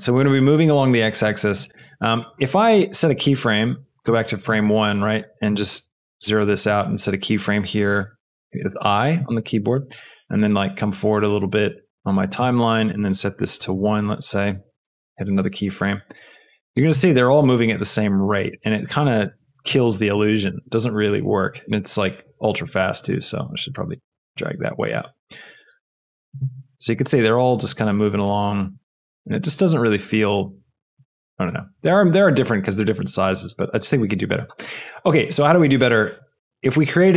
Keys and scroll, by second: 5.8 KP_0, 6.0 Return, 9.8 space, 12.4 space, 13.5 KP_1, 13.7 Return, 14.8 i, 16.1 space, 19.2 space, 24.1 g, 25.6 space, 33.5 space.